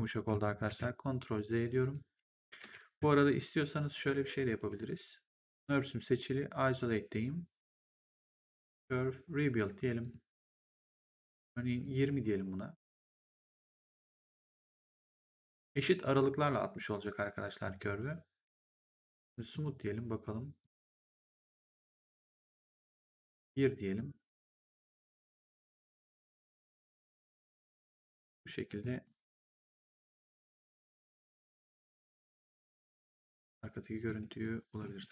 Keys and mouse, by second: 0.6 ctrl+z, 1.7 right click, 2.5 ctrl+z, 3.8 click, 4.5 ctrl+1, 8.6 click, 9.9 click, 11.7 click, 14.5 click, 15.9 right click, 17.5 right click, 19.4 click, 20.5 click, 22.5 click, 23.9 click, 25.1 click, 29.3 middle click, 31.6 middle click, 34.3 middle click.